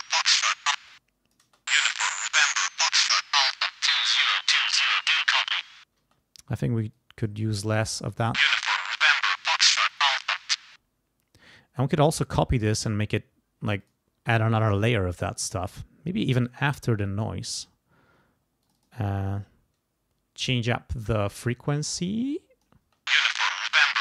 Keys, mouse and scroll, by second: 0.4 click, 0.8 space, 0.9 click, 1.4 space, 2.5-4.1 drag, 6.0 space, 6.7-8.1 drag, 8.1 space, 9.9 click, 10.6 space, 12.5 right click, 13.8 click, 14.5 right click, 15.4 click, 17.1 click, 18.6 click, 22.0 click, 22.8 space.